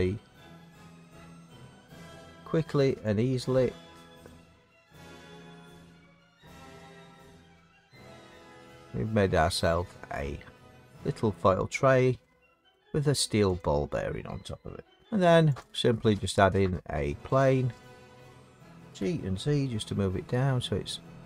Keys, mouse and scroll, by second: 1.0 middle click, 4.2 click, 9.5 middle click, 9.8 middle click, 9.8 middle click, 10.2 middle click, 11.4 middle click, 12.7 middle click, 13.6 click, 15.0 s, 15.0 click, 15.0 middle click, 15.6 click, 17.2 click, 18.9 g, 20.6 z.